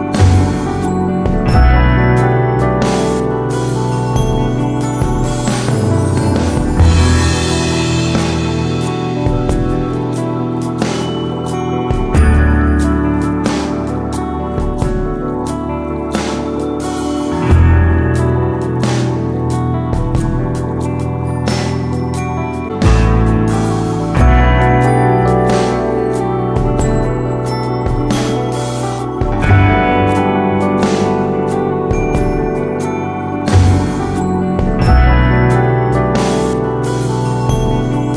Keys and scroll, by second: 19.7 super+c, 21.5 super+v, 30.6 BackSpace, 32.7 super+d.